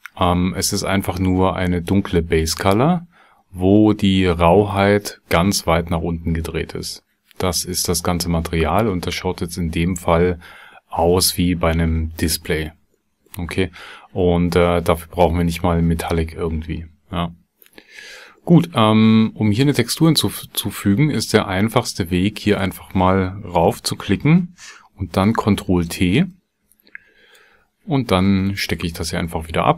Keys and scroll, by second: 25.2 ctrl+t.